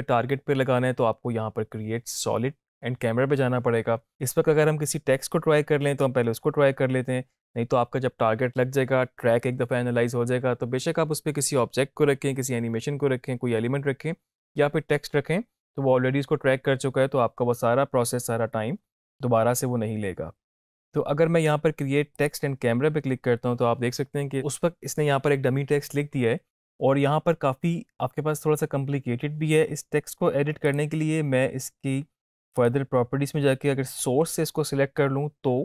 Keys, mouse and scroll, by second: 22.3 click, 30.7 click.